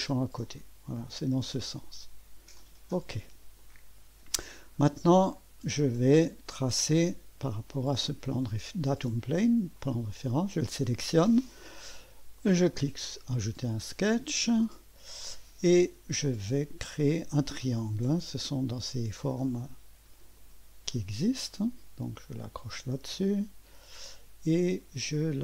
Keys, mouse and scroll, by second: 0.5-1.6 drag, 2.6 click, 2.9 click, 3.6-6.0 drag, 6.6 click, 9.8 click, 12.4 click, 12.7 click, 13.2 click, 13.8-14.5 scroll up 1, 14.5 right click, 18.1 click, 19.4 click, 20.4 click, 22.3 click.